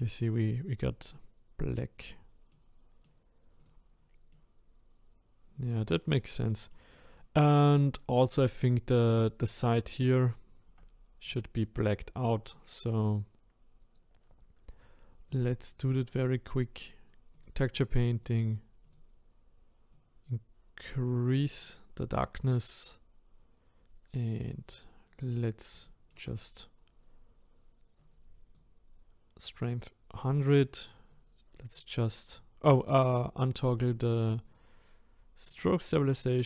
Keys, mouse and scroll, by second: 0.3-4.0 middle drag, 4.0-4.3 scroll down 4, 4.3-6.0 middle drag, 6.0-6.5 scroll up 4, 6.5-8.1 middle drag, 8.1 scroll up 1, 8.4-10.3 middle drag, 10.3 click, 11.3 click, 17.3-20.1 drag, 24.4 click, 28.1-36.4 drag.